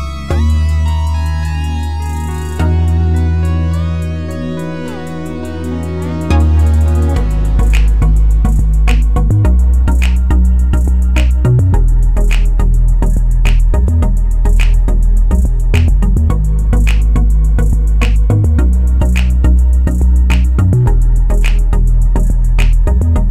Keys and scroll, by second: 20.0 2, 20.2 Return.